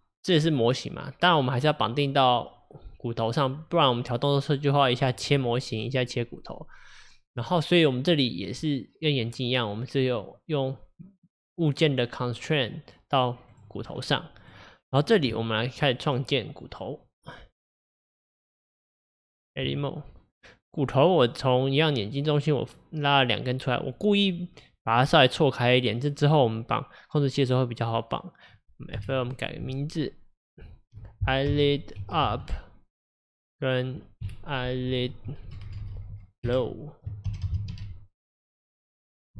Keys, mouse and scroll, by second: 3.6-5.3 scroll down 1, 13.6 click, 13.9-14.5 scroll up 4, 14.5 click, 15.4 Tab, 23.7 scroll up 1, 27.9 click, 29.0 F2, 33.4 click, 34.3 F2, 35.7 BackSpace, 36.0 BackSpace, 36.2 BackSpace.